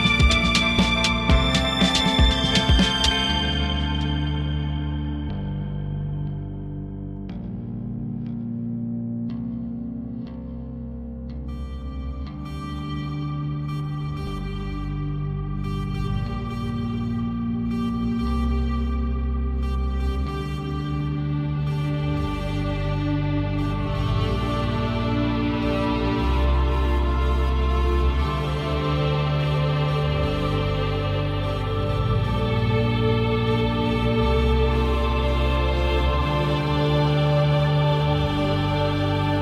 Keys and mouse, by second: 0.0 click, 0.7 shift+middle click, 0.9 click, 1.1 f, 1.7 click, 2.9 click, 3.3 click, 3.9 click, 4.2 shift+middle click, 4.3 click, 5.4 f, 6.9 ctrl+click, 7.3 click, 8.5 ctrl+middle click, 8.6 shift+middle click, 9.3 shift+middle click, 9.7 click, 10.9 middle click, 11.3 click, 11.5 Home, 11.7 middle click, 11.9 End, 12.3 click, 12.3-13.7 typing, 13.3 click, 14.2 Tab, 14.3 shift+middle click, 14.7 g, 15.7 click, 15.9-17.8 typing, 16.3 shift+middle click, 16.6 click, 17.1 click, 17.5 click, 17.9 Tab, 18.1 right click, 18.7 ctrl+middle click, 18.9 click, 19.5 f, 20.1 shift+middle click, 21.7 f, 21.8 click, 23.3 click, 23.7 shift+middle click, 24.5 click, 25.0 shift+middle click, 25.1 click, 25.6 shift+middle click, 25.7 click, 26.1 click, 26.8 ctrl+middle click, 27.3 f, 27.9 click, 28.3 click, 28.9 click, 29.2 f, 29.7 shift+middle click, 30.1 shift+middle click, 30.3 f, 30.3 click, 31.7 shift+click, 32.4 shift+click, 32.8 click, 33.0 f, 34.3 ctrl+click, 34.9 ctrl+click, 36.0 ctrl+click, 37.0 ctrl+click, 37.9 ctrl+click, 38.6 ctrl+click, 39.1 shift+middle click.